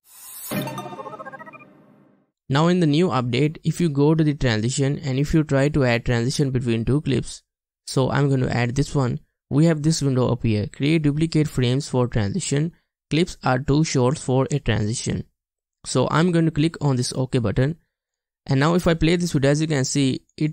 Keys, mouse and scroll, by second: 18.5 space, 19.4 space.